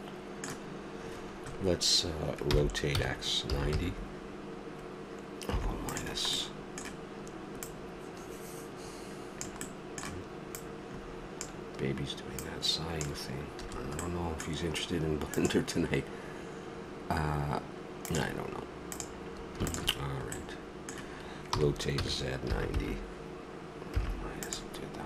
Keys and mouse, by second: 2.5 r, 6.4-7.6 middle drag, 7.6-9.4 drag, 9.6 middle click, 10.6-14.1 drag, 13.6 a, 14.1-15.4 middle drag, 18.9-20.4 right drag, 20.4-21.4 middle drag, 21.4 r.